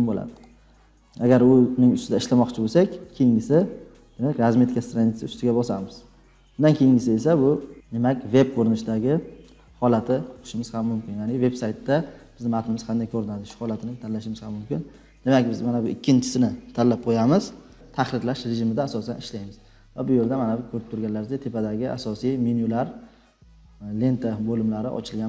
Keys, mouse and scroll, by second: 0.4-2.2 drag, 3.5 click, 3.7 click, 5.2-6.3 drag, 6.8 click, 10.4 scroll, 11.8-12.5 scroll down 4, 17.1 click.